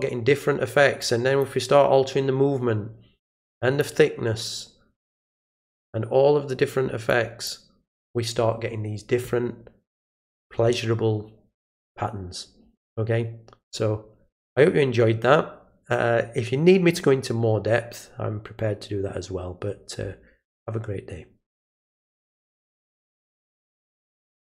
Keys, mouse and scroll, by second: 1.0-1.4 drag, 3.4-3.8 drag, 5.6 click, 7.1-7.4 drag, 22.8 click.